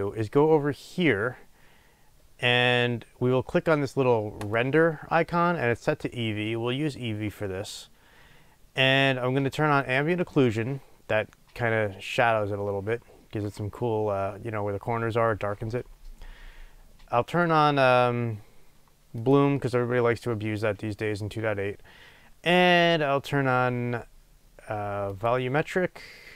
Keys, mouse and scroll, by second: 19.2 click.